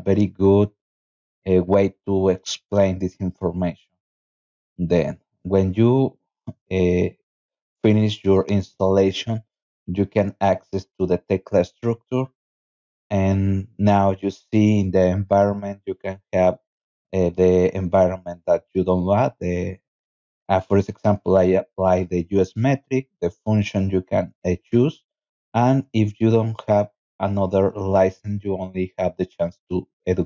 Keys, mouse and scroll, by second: 2.4 click, 2.6 click, 15.0 click, 18.8-19.8 drag, 19.9 click, 21.1 click, 22.4 click, 23.6 click, 28.2 click.